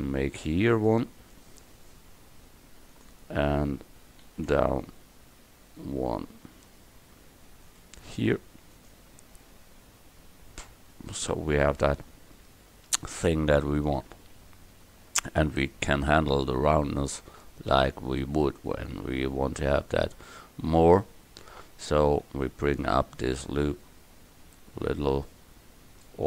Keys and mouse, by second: 4.3 ctrl+r, 9.6 Tab, 14.4 KP_1, 20.9 Tab.